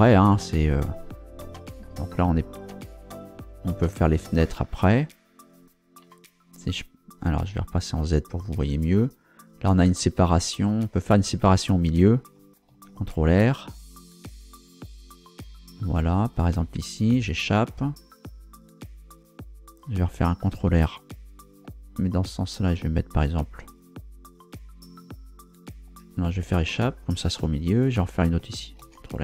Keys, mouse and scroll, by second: 6.0 Tab, 7.9 z, 12.7 ctrl+r, 16.2 click, 17.1 Escape, 20.7 ctrl+r, 21.2 ctrl+click, 26.5 ctrl+Escape, 28.8 ctrl+r.